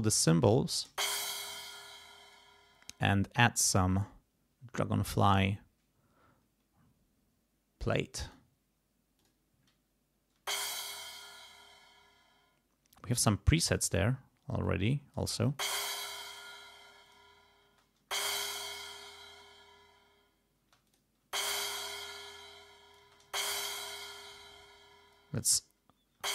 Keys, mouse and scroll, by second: 0.5 click, 0.9 space, 1.9 space, 2.3 right click, 3.9 click, 8.1 click, 9.2 click, 10.4 space, 10.9 click, 13.0 space, 13.8 click, 14.6 click, 15.5 space, 17.1 click, 17.7 space, 20.6 space, 20.9 click, 21.4 space, 22.6 click, 23.0 space, 24.1 click, 24.9 space, 25.1 click, 26.2 space.